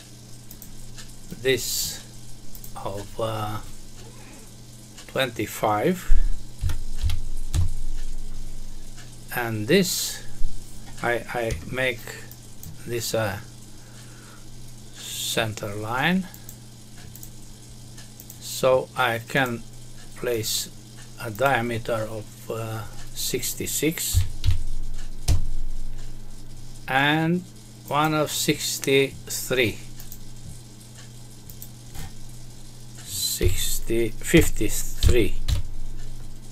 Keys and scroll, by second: 7.4 Return, 11.5 Escape, 25.2 Return, 34.3 BackSpace.